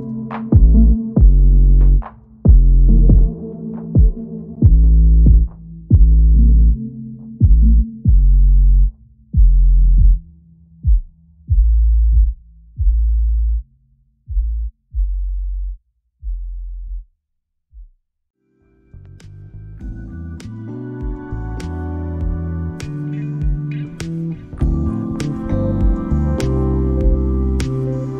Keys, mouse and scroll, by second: 0.0 s, 0.5 middle click, 0.8 middle click, 1.1 s, 2.9 middle click, 3.5 middle click, 3.8 g, 4.6 middle click, 4.8 right click, 6.1 middle click, 6.3 a, 6.4 a, 6.5 middle click, 7.7 right click, 8.0 middle click, 8.6 g, 8.8 middle click, 9.5 r, 10.3 g, 11.4 middle click, 12.2 middle click, 12.3 r, 13.1 middle click, 13.8 middle click, 14.0 middle click, 14.4 g, 14.8 middle click, 15.6 r, 16.8 g, 17.7 middle click, 18.0 g, 18.7 middle click, 19.3 middle click, 19.6 middle click, 20.1 middle click, 20.4 middle click, 20.6 middle click, 20.9 KP_1, 21.3 r, 22.9 click, 23.2 shift+middle click, 23.3 middle click, 23.6-27.3 typing, 24.1 shift+middle click, 24.8 middle click, 25.0 middle click, 26.9 shift+middle click, 27.0 middle click, 27.2 middle click, 28.0 middle click.